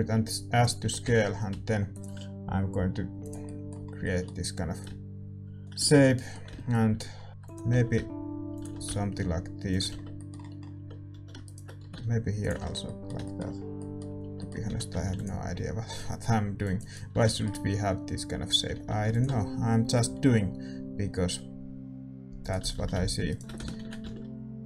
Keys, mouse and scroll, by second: 0.8 g, 2.7 s, 3.4-7.4 middle drag, 4.8-7.4 drag, 7.4 e, 7.7 s, 8.7 e, 9.9 Tab, 9.9-12.2 middle drag, 11.1 a, 11.4 click, 11.8 e, 11.9-13.2 right drag, 12.6 Tab, 12.8 click, 13.2-16.5 middle drag, 14.6 a, 15.0 ctrl+r, 16.7-18.8 right drag, 17.1 a, 17.2-20.3 middle drag, 18.8 ctrl+r, 22.7 a, 23.2-24.6 right drag, 23.7 ctrl+b.